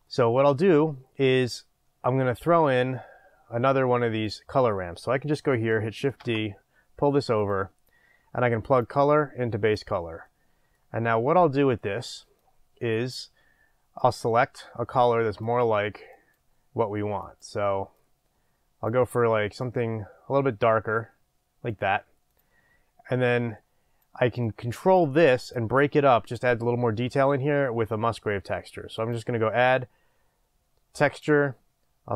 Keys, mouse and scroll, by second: 6.2 shift+d, 7.6 click, 8.9 drag, 10.3-12.4 middle drag, 10.9-11.8 scroll up 2, 11.8-12.4 scroll up 1, 12.4-14.2 drag, 15.6-16.7 middle drag, 22.4 click, 23.3-25.3 drag.